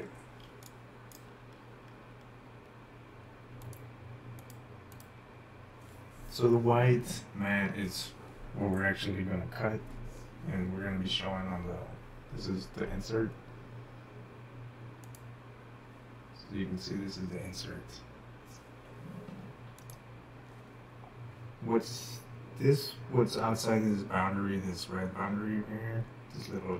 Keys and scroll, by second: 0.5-1.5 typing.